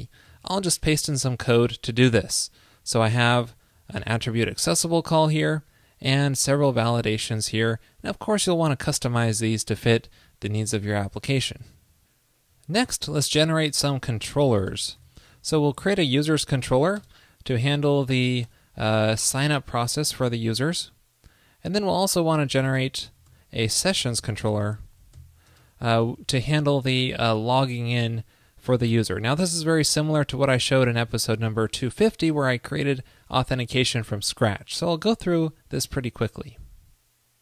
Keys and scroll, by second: 0.3 super+v, 3.4 super+Left, 3.7 alt+Right, 7.3 super+Down, 11.7 super+s.